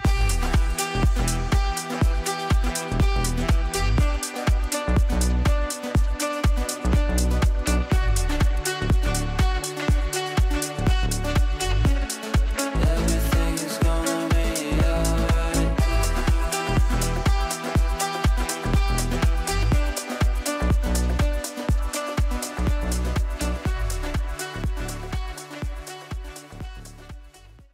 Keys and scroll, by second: 9.2 F9, 17.5 d, 24.6 f.